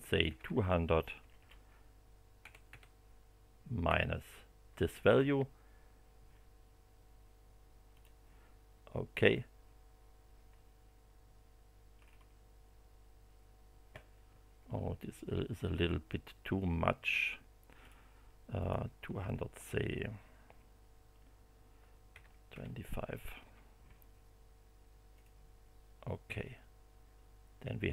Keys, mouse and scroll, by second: 0.2 9, 1.2 BackSpace, 2.4 0, 3.8 -, 7.9 click, 9.2 click, 11.9-12.3 scroll down 1, 17.8 click, 18.6 click, 18.9 BackSpace, 22.1 2, 22.5 5, 22.9 Delete, 25.1 click.